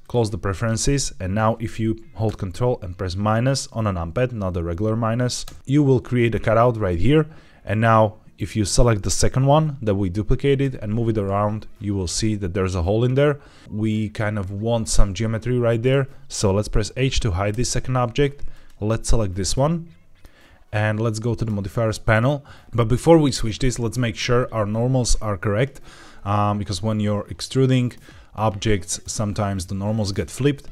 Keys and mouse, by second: 5.3 ctrl+KP_Subtract, 7.6 click, 10.5 g, 15.7-17.4 right drag, 17.4 h, 18.4 click, 19.4-20.1 middle drag.